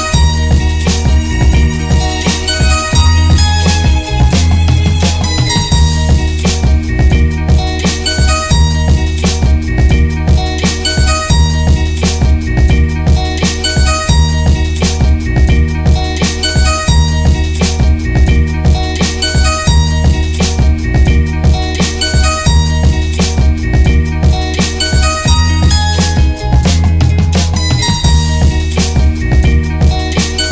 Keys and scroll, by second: 0.1 Left, 2.8 Return, 14.8 ctrl+g, 15.4-16.3 typing, 16.3 alt+e, 20.6 Left, 20.9 Left, 23.6 Return, 25.1 ctrl+g, 25.7 Tab, 25.8 Tab, 30.1 Left, 30.4 Left.